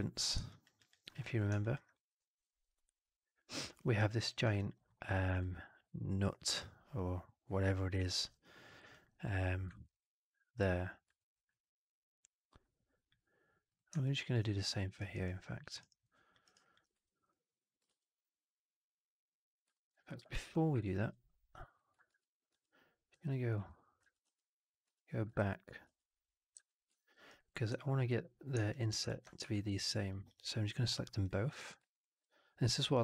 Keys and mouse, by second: 13.6 click, 13.9-14.2 alt+drag, 14.4 click, 14.7 alt+middle drag, 14.9 alt+right drag, 15.1 alt+right drag, 15.5 alt+click, 15.7 alt+right click, 15.9-16.2 alt+drag, 16.3 alt+right drag, 16.5 alt+click, 16.8 3, 17.1 click, 17.8 shift+Tab, 19.6 alt+middle click, 19.8 alt+right click, 20.0 alt+click, 20.3 4, 20.9 ctrl+a, 22.5 ctrl+z, 24.1 ctrl+z, 25.7 ctrl+z, 26.9 middle click, 27.0 right click, 27.3 click, 27.6 4, 28.0 click, 28.6 shift+click, 29.0 alt+click, 29.3 3, 29.6 alt+click, 30.0 alt+click, 30.8 4, 31.1 click, 31.8 shift+click, 32.9 alt+middle click.